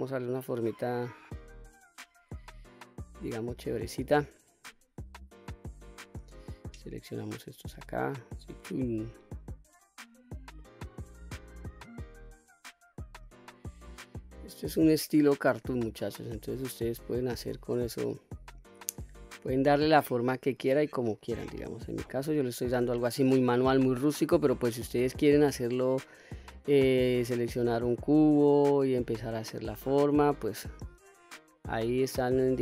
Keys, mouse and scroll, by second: 0.4-2.8 drag, 5.2-6.2 drag, 7.1-8.8 drag, 9.3 click, 10.5-13.6 drag, 16.5 click, 18.3-19.4 drag, 19.9-22.9 drag, 23.7 click, 24.8-26.5 drag, 27.9-29.1 drag, 29.7-30.7 drag, 31.6-32.6 drag.